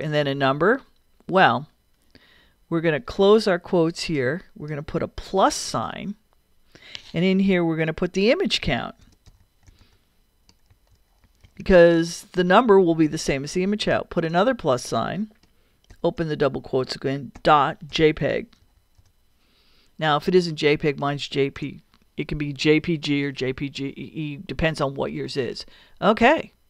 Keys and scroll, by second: 0.0-0.2 typing, 3.8 shift+', 5.4 shift+=, 8.8-11.7 typing, 13.9 shift+=, 15.9 shift+', 18.0-19.5 typing, 21.6 BackSpace.